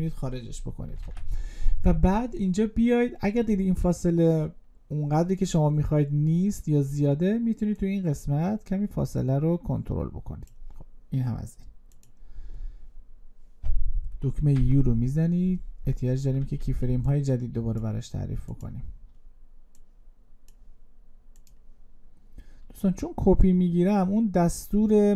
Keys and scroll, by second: 0.8 ctrl+a.